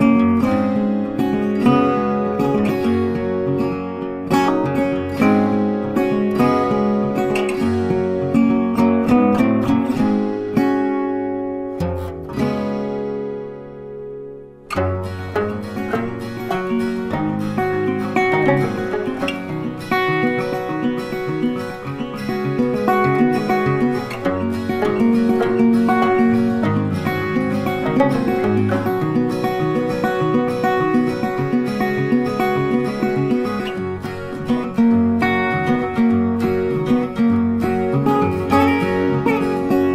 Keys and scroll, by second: 12.4 ctrl+c, 12.5 ctrl+f, 15.9 ctrl+8, 18.7 ctrl+c, 18.8 ctrl+f, 29.1 ctrl+z.